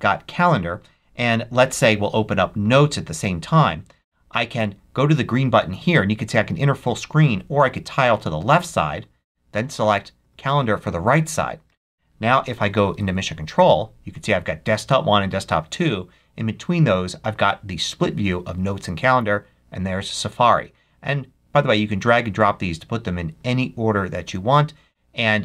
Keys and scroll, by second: 12.8 ctrl+Up.